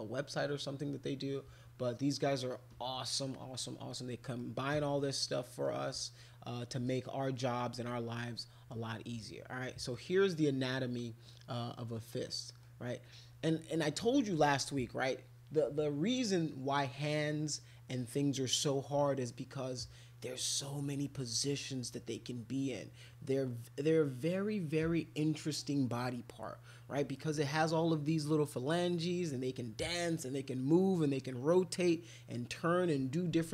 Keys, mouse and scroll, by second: 2.2 middle click, 3.9 middle click, 4.6 middle click, 5.4 middle click, 6.8 middle click, 7.3 middle click, 9.7 middle click, 11.3-12.6 middle drag, 13.5 middle click.